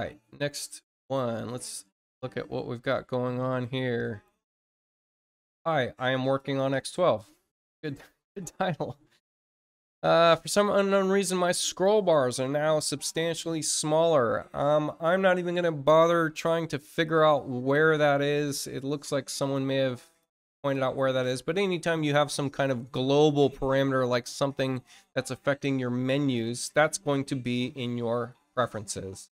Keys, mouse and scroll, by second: 0.9 click, 6.3 click, 8.6 middle click, 8.6-9.0 scroll down 2, 20.0 click, 26.8 click, 28.5 click.